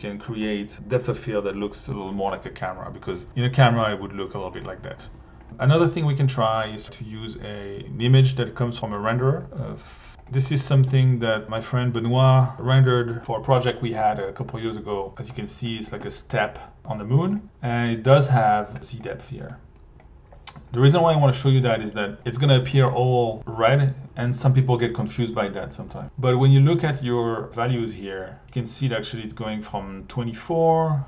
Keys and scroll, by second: 8.7 r, 18.2 1, 22.1 alt+1.